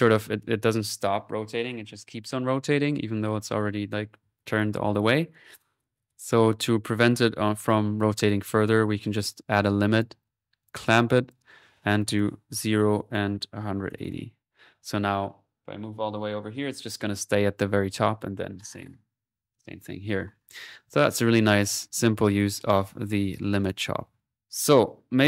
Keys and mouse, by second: 5.4 click, 6.5 right click, 6.8 click, 7.5-8.3 typing, 8.7-9.8 drag, 9.9 click, 10.6-11.7 drag, 11.9 click, 13.0 click, 20.4 middle click, 20.7 click, 21.1 right click, 21.6 click, 22.7 click, 23.1 middle click, 23.5 click, 24.4 ctrl+s, 24.4 ctrl+middle click.